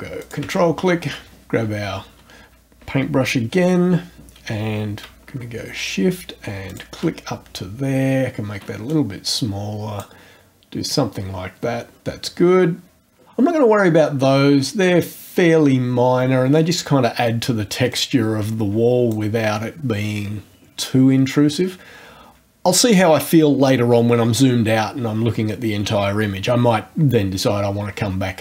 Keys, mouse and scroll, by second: 0.2 ctrl+click, 6.7 shift+click, 7.4-8.1 shift+scroll down 2, 8.9-10.2 drag, 17.9-19.3 drag.